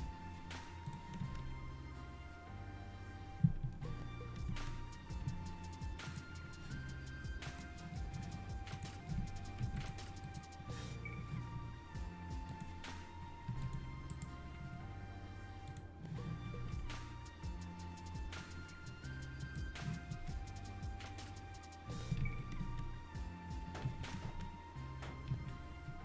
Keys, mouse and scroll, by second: 0.9 click, 1.2 space, 3.7 Escape, 4.5 space, 5.3 Escape, 6.1 click, 7.5 click, 8.7 click, 9.6 shift+g, 12.5 click, 14.1 right click, 16.6 alt+a, 19.5 click, 20.1 space, 22.2 Escape, 22.6 space, 23.9 Escape, 24.2 space, 25.3 Escape, 25.9 `.